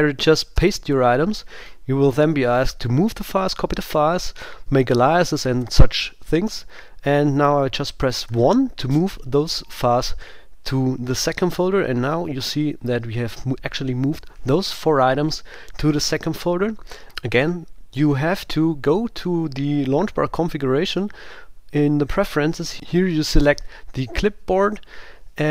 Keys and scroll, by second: 0.5 super+v, 2.8 Down, 5.0 Up, 21.0 super+,.